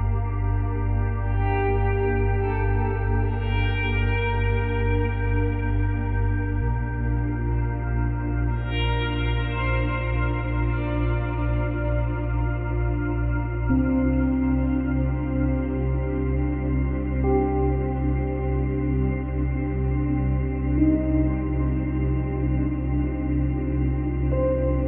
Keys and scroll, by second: 9.9 space, 10.9 Left.